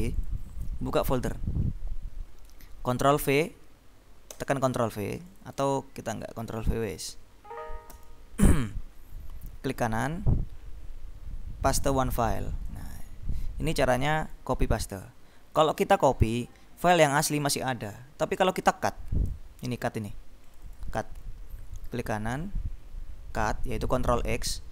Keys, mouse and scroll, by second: 1.3 click, 4.5 ctrl+v, 5.4 click, 7.0 shift+Delete, 8.1 Return, 9.9 right click, 11.8 click, 12.8 click, 14.4 click, 18.8-19.9 drag, 20.6 click, 22.0 right click, 24.2 click.